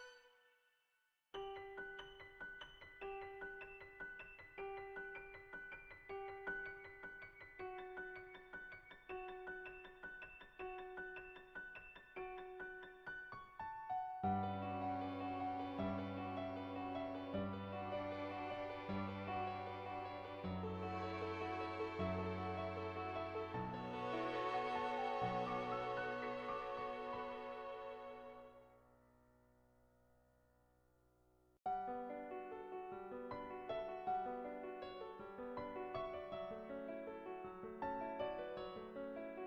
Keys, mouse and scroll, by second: 0.2 click, 0.6-3.4 drag, 3.4 shift+middle click, 4.6 shift+middle click, 5.8 click, 6.5 click, 6.9 shift+middle click, 8.2 shift+middle click, 9.2 middle click, 9.9 shift+middle click, 10.6-11.8 shift+middle drag, 14.8 click, 16.2 ctrl+z, 17.6 click, 18.6 click, 19.2 click, 24.6 click, 25.2 ctrl+z, 25.4 [, 25.5 [, 25.6 click, 26.3 ctrl+z, 26.7 [, 26.8 [, 27.2 middle click, 27.9 Tab, 29.4 shift+s, 30.7 middle click, 31.8 Tab, 32.2 click, 32.7 click, 33.4 click, 34.3 click, 34.6 middle click, 35.7 ctrl+z, 35.9 shift+middle click, 38.5 click.